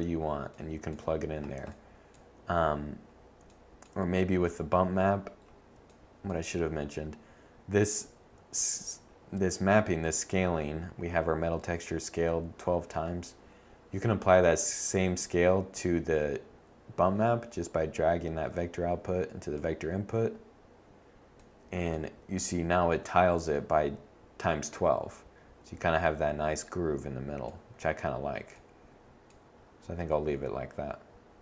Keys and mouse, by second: 19.5-21.4 middle drag.